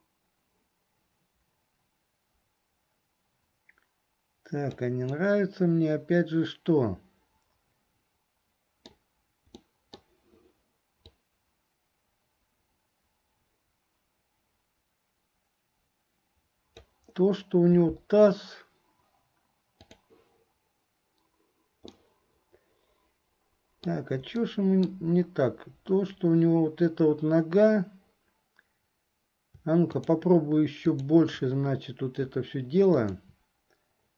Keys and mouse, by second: 5.3-9.1 middle drag, 9.7 middle click, 11.3-17.1 drag, 20.0 click, 22.0-24.1 middle drag, 24.5 middle click, 30.0 shift+click, 31.0 shift+click, 33.0 shift+click.